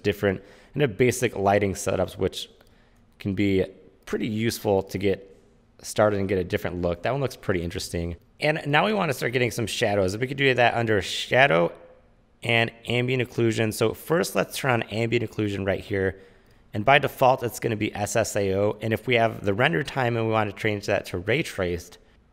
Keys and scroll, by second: 8.1 u, 8.2 space.